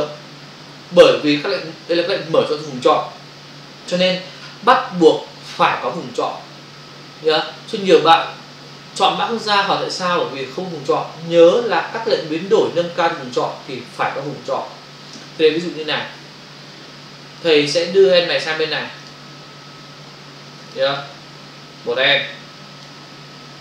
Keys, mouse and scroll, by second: 17.3 click, 19.1 click, 20.6 ctrl+click, 21.0 click.